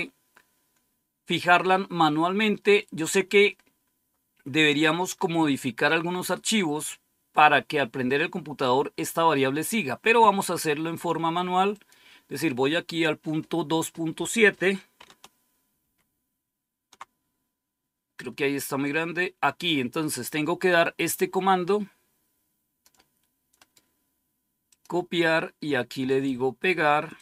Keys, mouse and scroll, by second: 10.8 click, 11.6 click, 15.7 ctrl+-, 18.1-18.7 scroll down 1, 20.8-22.8 drag, 23.5 right click, 24.6 click, 25.9 right click, 27.1 click.